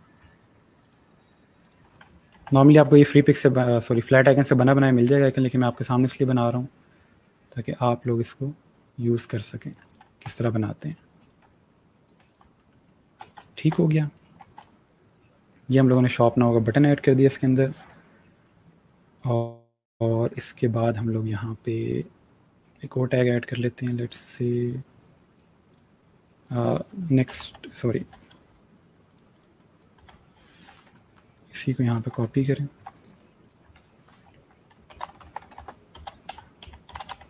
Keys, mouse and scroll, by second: 2.2 ctrl+g, 2.8-3.9 alt+scroll down 1, 3.9-4.5 scroll down 1, 4.6 shift+click, 7.9 click, 12.4 alt+scroll down 1, 13.1 scroll down 1, 13.2 space, 13.3 click, 13.9-14.4 alt+scroll down 2, 14.4 space, 14.5 click, 14.9 space, 15.7 click, 19.0 click, 25.0 click, 26.8-27.7 typing, 28.9 click, 29.7 click, 30.3 click, 32.2-32.7 alt+scroll up 1, 32.7 scroll up 1, 32.8 click, 34.5-37.2 typing.